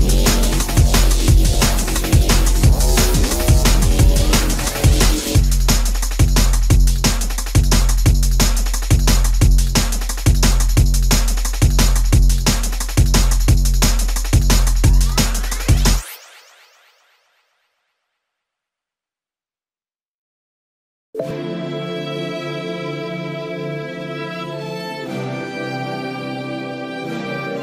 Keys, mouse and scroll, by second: 8.6 shift+middle click, 12.6 space, 13.0 shift+middle click, 16.2 Delete, 18.4 Delete, 20.2 Delete, 25.9 ctrl+a.